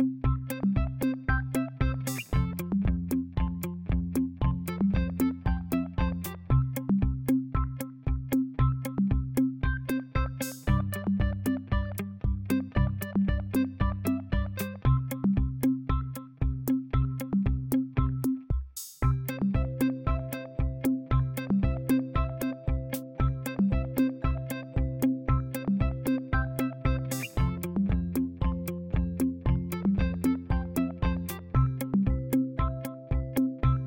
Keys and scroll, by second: 12.5 ctrl+a.